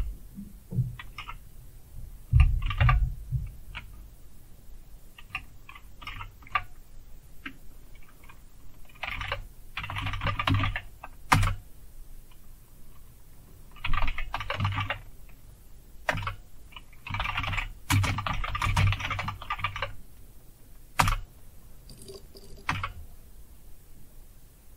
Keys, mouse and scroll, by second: 1.1 Up, 2.6 r, 6.0 super+Up, 8.8-11.1 typing, 11.3 Return, 13.6-15.2 typing, 16.1 Return, 16.8-20.9 typing, 22.7 Return.